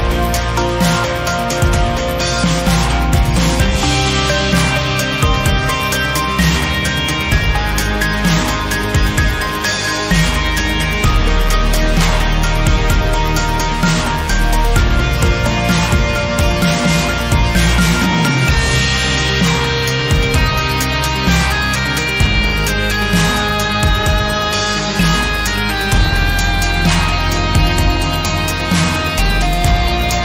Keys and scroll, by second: 0.7 Tab, 3.8 Tab, 6.8 3, 19.8 i, 29.4 g, 30.0 z.